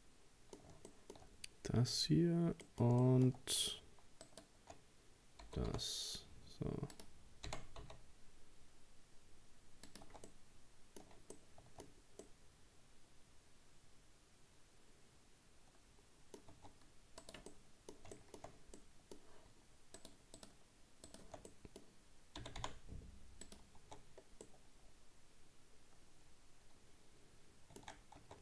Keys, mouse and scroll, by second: 1.3-2.2 scroll up 1, 2.2-2.6 scroll down 2, 2.6-4.2 middle drag, 4.2 shift+right click, 5.5 g, 7.5 r, 10.1 Tab, 10.3-15.3 middle drag, 16.6 Tab, 17.2 right click, 17.5 middle click, 18.5-18.8 shift+scroll up 2, 18.8-20.0 middle drag, 20.0 shift+right click, 20.4 shift+right click, 21.1 shift+right click, 21.5 middle click, 22.4 g, 23.9 Tab, 24.0-24.5 scroll down 1, 24.5-27.5 middle drag, 28.3 Tab.